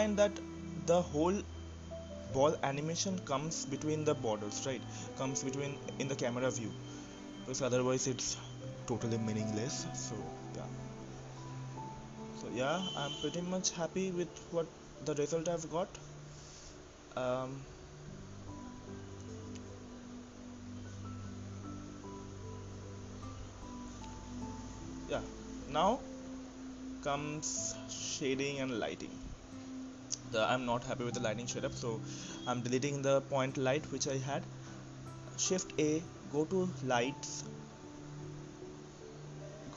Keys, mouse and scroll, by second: 0.0-1.4 shift+middle drag, 1.4 scroll up 2, 1.7 shift+middle click, 2.1-2.5 scroll down 1, 2.5-3.5 middle drag, 3.5-4.1 scroll down 1, 4.1-6.3 shift+middle drag, 6.3-7.9 drag, 7.9-8.7 scroll up 2, 8.7-9.4 scroll up 1, 9.4-11.7 shift+middle drag, 11.7 click, 12.4-13.2 scroll down 1, 17.6-18.4 scroll down 2, 18.4-19.6 scroll down 5, 19.6-22.0 scroll down 16, 22.0-23.0 scroll up 5, 23.0-27.2 drag, 28.5 click, 30.7 click, 32.2 Delete, 33.8 click, 34.8 shift+a, 37.3-38.3 drag, 38.8 drag, 39.3-39.7 drag.